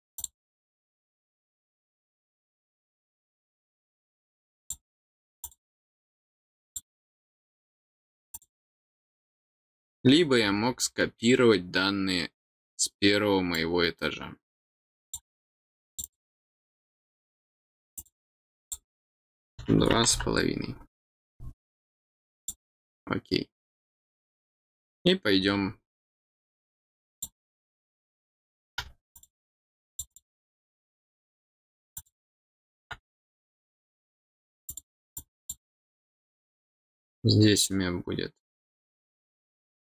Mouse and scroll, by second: 0.1 click, 4.6 click, 5.4 click, 6.6 click, 8.3 click, 9.2-11.6 scroll down 8, 11.6 scroll down 1, 13.5-15.1 drag, 15.8 click, 16.0 click, 17.9 click, 18.2 click, 22.4 click, 24.5 middle click, 27.1 click, 29.1 click, 29.8 click, 30.1 click, 31.9 click, 33.1 click, 34.6 click, 35.1 click.